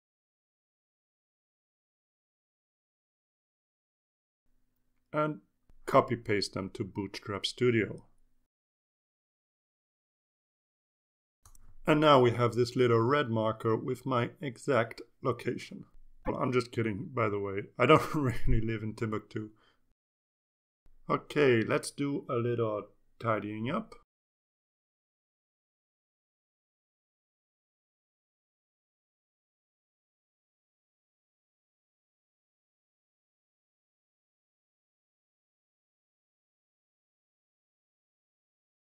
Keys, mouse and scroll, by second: 0.4 click, 2.2 click, 9.2 click, 10.6 ctrl+c, 11.9 click, 12.8 ctrl+click, 13.3 ctrl+a, 13.6 ctrl+v, 14.2 Return, 22.4 click, 22.8-23.9 typing, 24.3-25.4 drag, 25.9 click, 26.5-27.3 drag, 28.5 click, 29.8 click, 31.2 click, 31.7-33.0 typing, 33.4-34.5 drag, 34.9 click, 37.2 click, 37.9-38.9 typing.